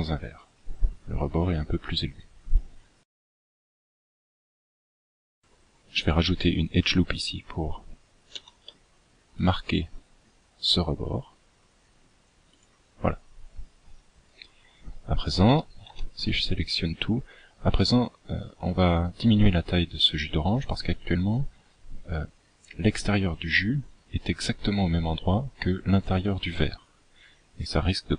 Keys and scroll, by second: 6.0 ctrl+r, 13.0 a, 13.4 a.